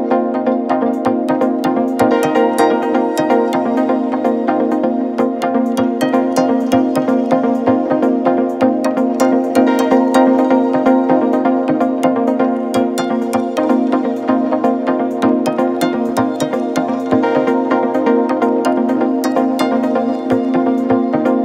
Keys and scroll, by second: 0.0 ctrl+z, 0.2 space, 0.5 ctrl+=, 4.8 space, 12.4 ctrl+z, 14.2 space, 14.4 ctrl+=, 18.6 ctrl+z.